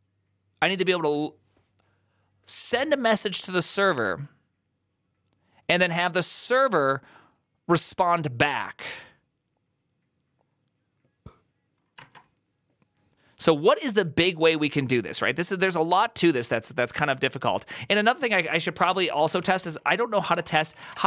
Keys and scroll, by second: 11.9 alt++, 18.7 alt+{, 18.7 ctrl+c, 18.8 ctrl+c, 18.9 ctrl+a, 19.1-21.0 typing, 19.4 ctrl+c, 20.1 ctrl+c, 20.2 Return.